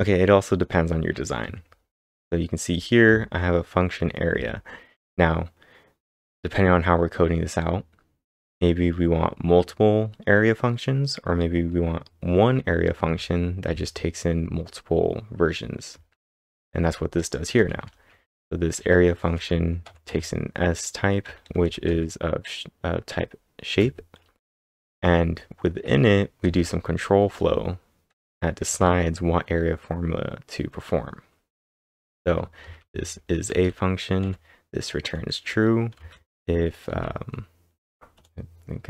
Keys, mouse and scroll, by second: 1.2-4.8 typing, 12.8-13.5 typing, 15.9 typing, 17.8-22.1 typing, 24.5 typing, 31.9-34.2 typing, 36.0 shift+v, 36.9 k.